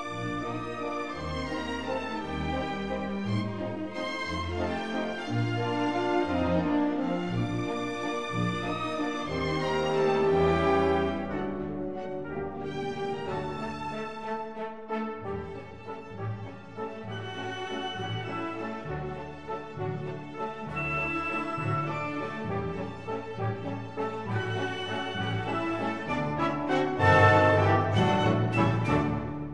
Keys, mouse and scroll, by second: 0.5 ctrl+z, 1.3-3.3 middle drag, 6.2-7.8 middle drag, 21.4 k, 24.2-26.1 right drag, 25.8 k.